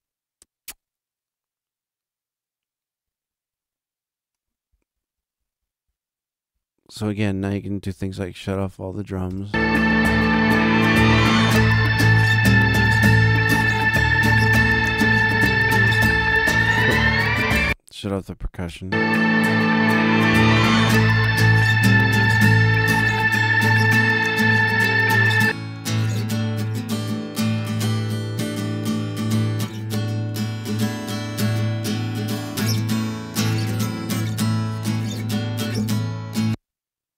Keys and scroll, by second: 9.2 space, 17.4 space, 18.6 space.